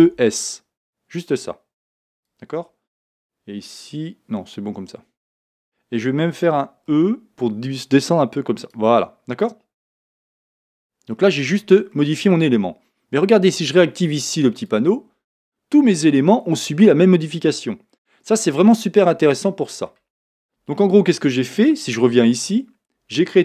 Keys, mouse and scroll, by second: 2.2 click, 6.9 e, 8.7 click, 9.0-14.6 middle drag, 10.2 Tab, 11.5-11.9 scroll up 2, 14.6 click, 15.3-23.4 middle drag, 20.2-20.7 scroll down 2, 22.0 Tab.